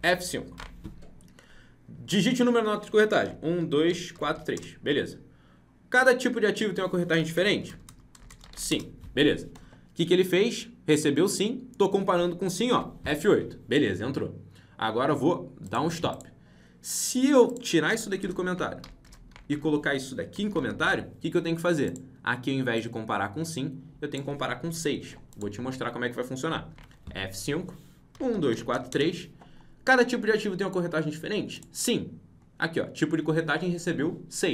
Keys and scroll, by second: 0.5 F5, 12.6 F8, 26.6 F5.